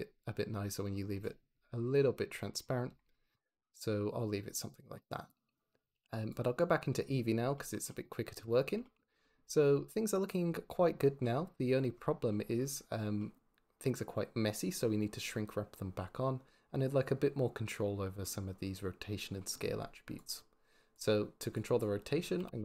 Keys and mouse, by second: 5.8 z, 7.8 click, 8.2 click, 20.1 click, 21.4 click, 22.5 r.